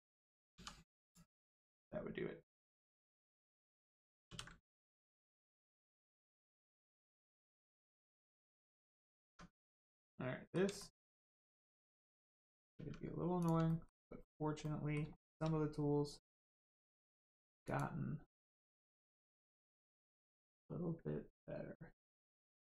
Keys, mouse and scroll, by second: 0.5 2, 1.0 click, 1.4 middle click, 1.7-2.4 scroll down 1, 3.3 click, 4.2 ctrl+e, 5.6 click, 6.1 middle click, 7.4 click, 8.1 middle click, 8.5-9.2 scroll up 1, 9.2 Tab, 9.6 middle click, 10.7 shift+middle click, 11.3 middle click, 11.3 middle click, 11.7 shift+middle click, 12.7 Tab, 13.3 click, 13.6 shift+middle click, 14.2 scroll down 1, 14.6 middle click, 15.1 shift+middle click, 15.5 scroll up 1, 16.5 shift+middle click, 17.6 click, 20.2 shift+middle click, 20.5 scroll up 1, 22.0 ctrl+click.